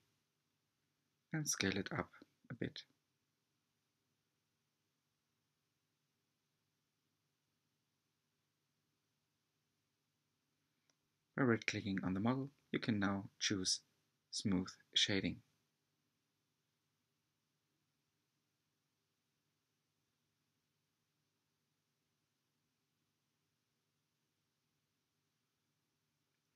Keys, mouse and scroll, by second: 3.9-5.0 scroll down 4, 5.0 Tab, 5.4-6.2 middle drag, 6.2 scroll down 2, 8.1 alt+z, 8.9-10.2 shift+middle drag, 10.2 right click, 11.4-11.9 right drag, 11.9-13.1 middle drag, 13.1-13.4 scroll down 2, 13.4-14.8 shift+middle drag, 14.8-15.3 scroll up 6, 15.3-16.2 shift+middle drag, 16.2-19.3 scroll down 2, 20.0 click, 20.9 scroll down 1, 21.1-23.2 middle drag, 23.2 click, 25.1-26.5 shift+middle drag.